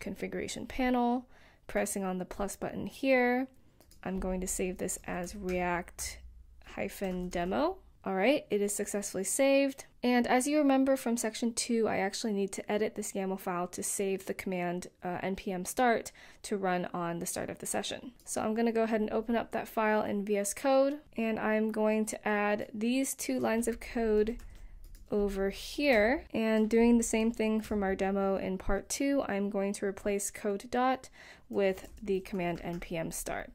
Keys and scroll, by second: 6.8-10.2 typing, 23.4 super+c, 25.2 Return, 25.8 super+v, 26.8 BackSpace, 27.0 BackSpace, 27.1 BackSpace, 28.9 Return, 29.2 space, 30.1 space, 31.3-33.4 typing.